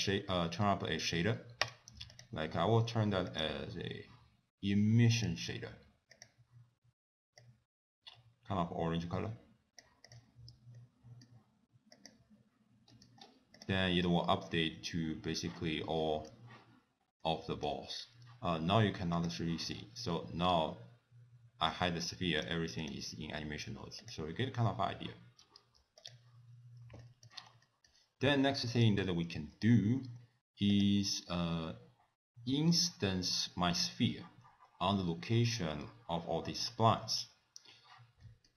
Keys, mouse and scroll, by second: 1.7 click, 2.2 click, 3.4 click, 6.2 click, 10.1 click, 10.8 middle click, 12.3 click, 13.0 middle click, 13.3-15.8 scroll up 4, 13.7 click, 16.1 middle click, 17.2 middle click, 17.8-19.3 scroll down 4, 19.3 click, 19.8-21.3 scroll up 7, 21.3-22.3 scroll up 2, 22.5 click, 22.9 click, 24.1 click, 25.5 scroll down 4, 26.1 click, 26.6-27.0 scroll down 2, 27.1 shift+middle click, 27.8 middle click, 28.0-28.4 scroll down 2, 28.5 middle click, 28.8 click, 29.4 ctrl+s, 30.3-30.8 scroll up 1, 30.8 click, 30.8 scroll up 1, 35.0-37.8 scroll down 2, 38.3 middle click.